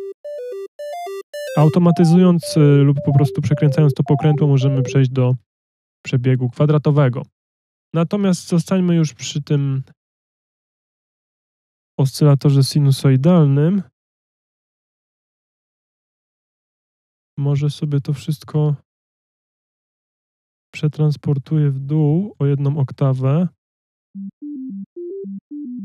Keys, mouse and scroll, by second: 23.5 F1, 23.8 space.